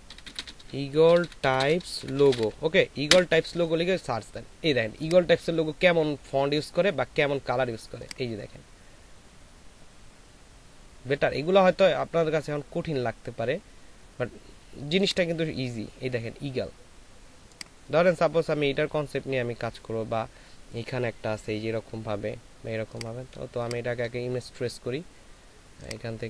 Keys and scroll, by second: 0.0-2.4 typing, 3.1 Return, 23.6 space.